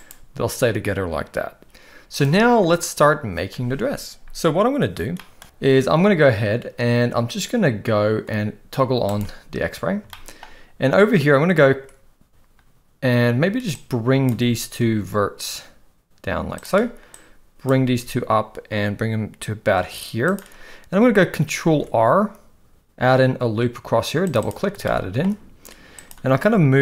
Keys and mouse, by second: 2.1 click, 9.0 click, 10.1 shift+middle click, 13.8 click, 14.7 g, 17.2 click, 17.8 g, 21.6 ctrl+r, 24.8 shift+middle click, 26.4 g.